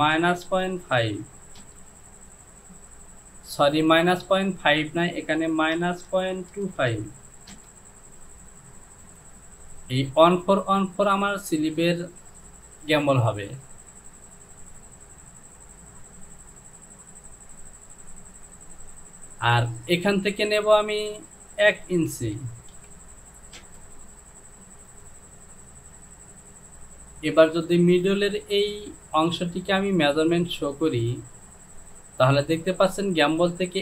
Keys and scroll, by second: 0.0 KP_Subtract, 0.5 KP_Decimal, 0.9 KP_5, 1.6 Return, 5.8 KP_Subtract, 6.1 KP_Decimal, 6.6 KP_2, 6.8 KP_5, 7.6 Return, 22.3 Down, 22.8 KP_1, 23.6 Return.